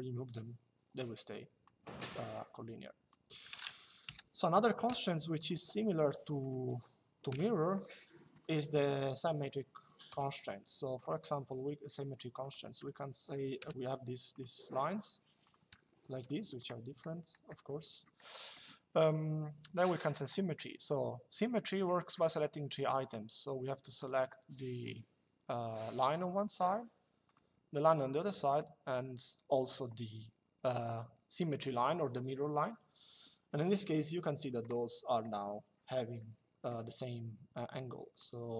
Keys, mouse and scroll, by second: 1.6 click, 3.8 Delete, 4.6 l, 6.4 Escape, 7.0 l, 9.0 Escape, 9.8 l, 12.1 click, 12.5 Escape, 13.3 l, 15.1 click, 15.4 Escape, 16.0 middle click, 18.0 middle click, 19.8 click, 23.7 click, 27.0 click, 28.2 click, 34.0 Escape, 37.3 click.